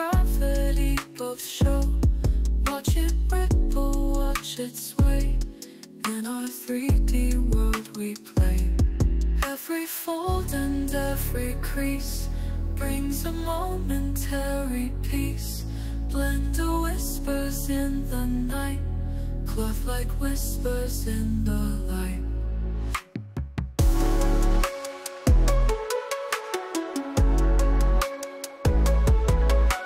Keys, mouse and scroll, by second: 0.7 click, 2.0 i, 4.2-7.5 drag, 7.9 space, 8.5 ctrl+Tab, 9.6 click, 10.6 alt+click, 13.9 click, 15.0 space, 15.3-15.6 drag, 15.7 g, 16.6 click, 17.3 space, 21.9 space, 22.1 click, 23.1 drag, 23.8 drag, 24.1 ctrl+c, 24.7 click, 25.8 ctrl+v, 26.1-26.4 drag, 26.5 space.